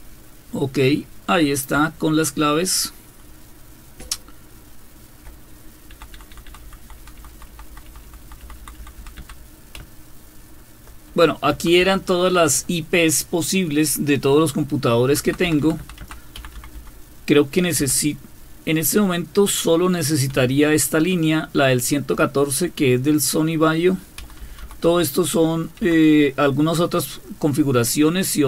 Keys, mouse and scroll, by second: 0.6-1.3 Up, 2.0-5.1 Up, 5.9 Down, 6.1 Down, 6.3 Down, 6.4-9.8 Down, 9.8-10.8 Right, 15.1 Down, 15.2 Down, 15.4 Down, 15.6 Down, 15.8 Down, 16.3 Up, 16.5 Up, 16.7 Up, 17.8 Down, 20.3 Right, 21.0 Right, 21.3-22.4 Right, 24.2 Up, 24.4 Up, 24.6 Up, 24.8 Up, 25.8 Down.